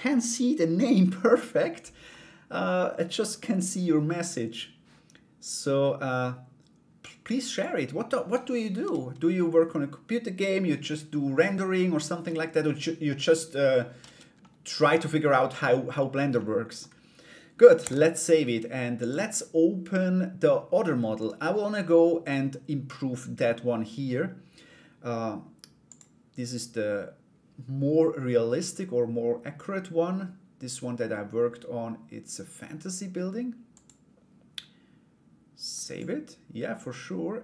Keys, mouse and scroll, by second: 1.7-3.8 middle drag, 6.7 click, 11.5 middle click, 14.0 middle click, 15.9 middle click, 17.4 ctrl+s, 18.6-20.3 drag, 25.4-35.6 drag.